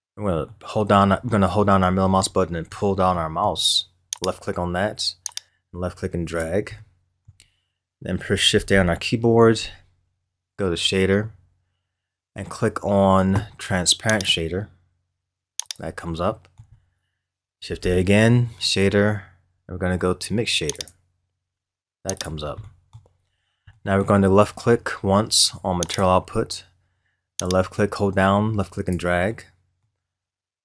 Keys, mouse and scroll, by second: 4.1 click, 5.3-6.8 drag, 6.8-8.7 middle drag, 8.7 shift+a, 16.2-17.8 middle drag, 17.8 shift+a, 22.6-23.3 middle drag, 23.3 scroll down 3, 23.8-24.7 middle drag, 24.7 scroll up 2, 25.9 click, 27.4-29.3 drag, 29.3-30.6 middle drag.